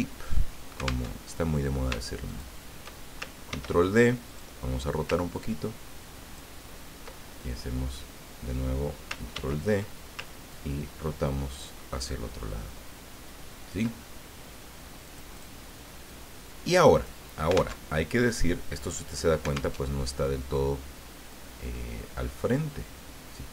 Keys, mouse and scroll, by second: 1.0 alt+Tab, 2.3 shift+click, 3.5 ctrl+d, 4.2 click, 5.3-6.5 ctrl+drag, 9.3 ctrl+d, 10.5-14.5 ctrl+drag, 15.0 click, 16.1-17.2 drag, 17.8 alt+Tab, 19.7 alt+Tab, 21.3-23.5 drag.